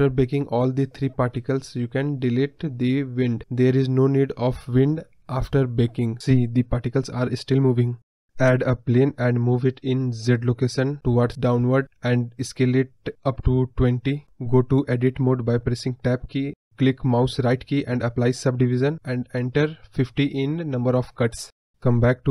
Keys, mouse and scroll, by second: 2.5 x, 3.1 click, 3.8 space, 6.8-7.7 scroll up 1, 8.1 shift+a, 10.8-13.9 drag, 13.9 scroll down 2, 14.2-15.6 middle drag, 15.6 Tab, 16.5-18.2 right drag, 18.2 click, 18.8 scroll down 2, 19.0 middle click, 19.7-20.0 scroll up 5, 20.0-20.5 scroll down 1, 20.6 Tab, 20.9 scroll down 2, 21.0-22.3 middle drag.